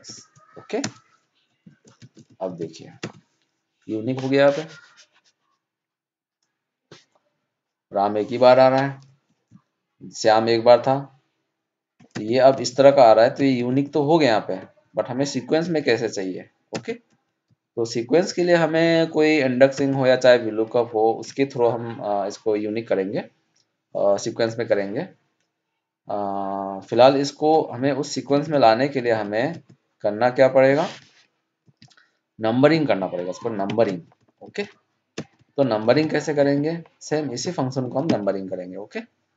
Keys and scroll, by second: 1.9 ctrl+shift+Down, 2.4 ctrl+d, 12.5 ctrl+Down, 14.6 ctrl+Up.